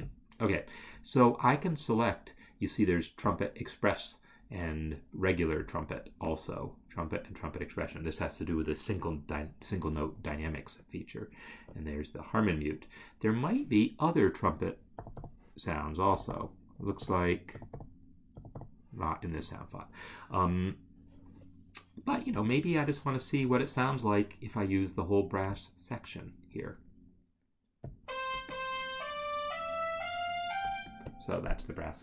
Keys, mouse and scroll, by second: 25.8 click, 30.7 space.